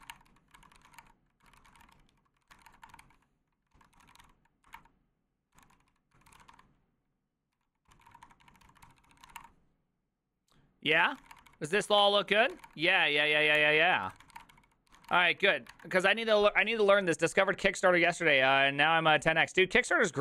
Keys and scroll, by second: 0.0-9.8 typing, 4.7 Up, 4.8 Return, 11.1 ctrl+c, 11.1 Return, 11.3-12.6 typing, 11.5 Return, 11.5 ctrl+d, 11.8 ctrl+c, 12.3 Return, 12.3 ctrl+d, 12.5 ctrl+c, 12.6 ctrl+:, 12.7 Return, 13.6 ctrl+h, 14.0-15.6 typing.